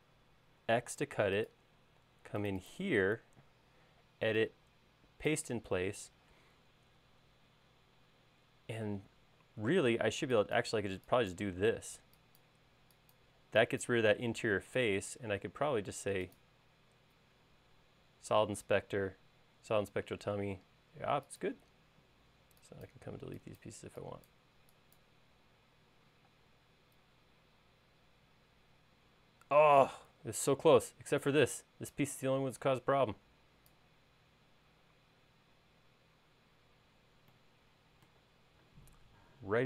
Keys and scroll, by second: 1.3 super+x, 10.5 e, 22.8 e, 27.1 space, 32.1 p.